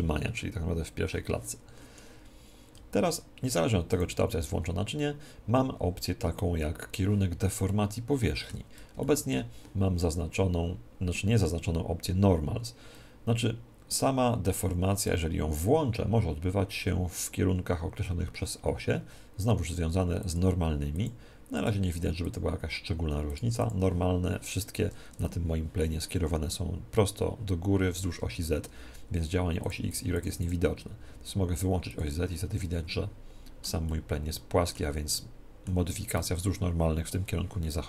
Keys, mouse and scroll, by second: 3.9 click, 7.7-15.0 middle drag, 15.0 click, 20.2-25.5 drag, 25.1 Tab, 29.6-33.7 drag, 32.5-36.9 middle drag.